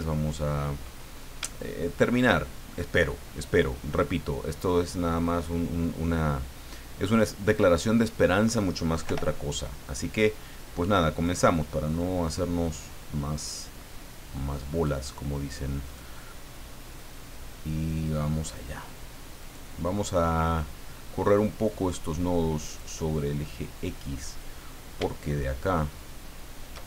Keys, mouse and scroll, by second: 0.5-0.8 scroll up 2, 1.2 scroll down 3, 1.5 shift+middle click, 7.4 click, 9.0 o, 11.2 right click, 12.6-15.0 drag, 15.8 right click, 17.0-18.7 drag, 19.4 right click, 20.1-21.8 drag, 22.6 right click, 23.6 click.